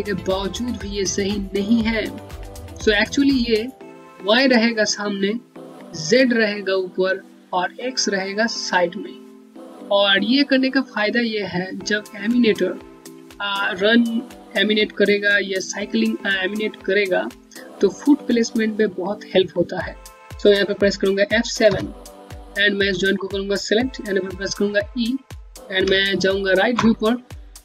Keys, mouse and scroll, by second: 21.3 F7, 22.4 click, 25.5 space, 25.7 click, 26.1 space.